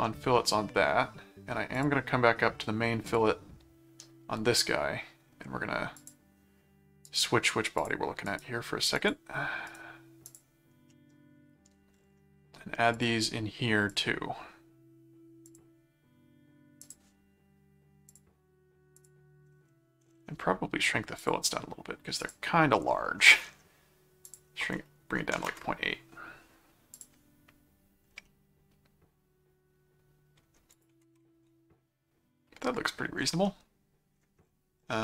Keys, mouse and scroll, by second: 0.0 middle click, 1.7 click, 3.0 click, 5.9 click, 7.0 right click, 7.8 click, 8.2 right click, 8.9 click, 9.6 right click, 10.3 click, 10.9 middle click, 12.9 click, 13.9 click, 15.5 click, 16.8 click, 18.1 click, 18.9 click, 21.2 click, 22.2 click, 24.2 click, 26.9 click, 28.3-30.4 middle drag, 30.7 ctrl+click, 31.0 ctrl+Tab, 33.5 middle click.